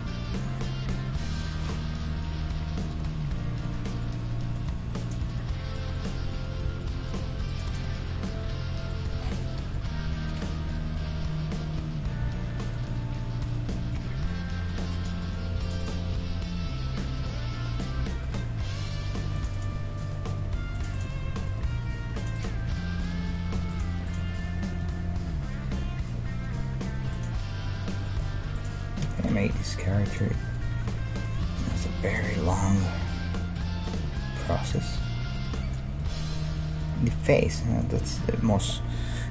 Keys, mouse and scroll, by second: 0.2 g, 2.0-3.8 right drag, 2.3 g, 3.4 g, 4.1-11.7 right drag, 4.7 g, 6.6 g, 7.2 g, 9.1 g, 10.1 g, 13.4-17.5 right drag, 13.7 g, 16.1 g, 17.7-19.4 middle drag, 18.2-19.4 right drag, 19.4 ctrl+Tab, 20.4 g, 21.7 g, 23.2-28.0 right drag, 23.2 g, 24.4 g, 25.2 g, 25.7 g, 27.0 g, 28.0 middle click, 29.4 ctrl+Tab, 30.1-39.0 right drag, 30.9 f, 31.7 f, 32.2 ctrl+Tab, 33.0 g, 34.1 g, 35.6 g, 36.6 g, 37.7-39.3 middle drag, 38.0 a, 38.2 a.